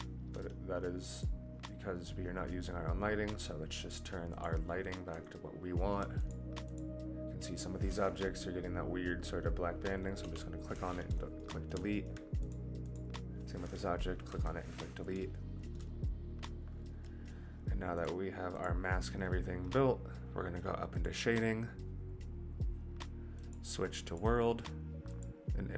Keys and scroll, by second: 10.2 Delete, 14.2 Delete.